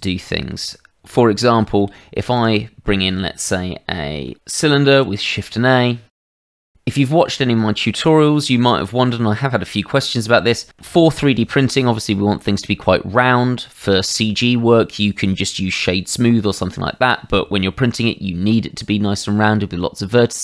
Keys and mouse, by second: 0.2 middle click, 0.7 shift+middle click, 1.1 Tab, 1.9 shift+middle click, 2.3 click, 2.8 middle click, 3.2 shift+middle click, 4.0 middle click, 4.9 shift+a, 6.6 click.